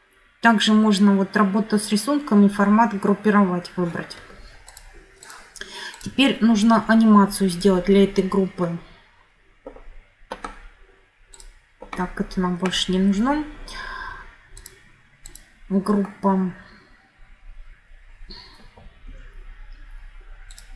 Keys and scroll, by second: 19.0 F9.